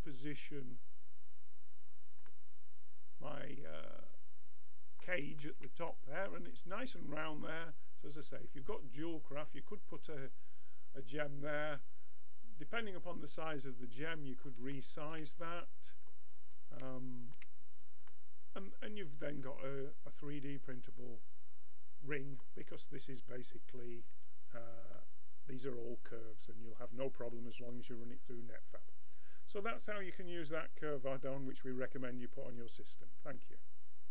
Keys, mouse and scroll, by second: 3.7 middle click, 4.2-5.4 middle drag, 8.7-10.5 drag, 10.5-13.6 middle drag, 19.9 middle click, 25.0-27.8 middle drag.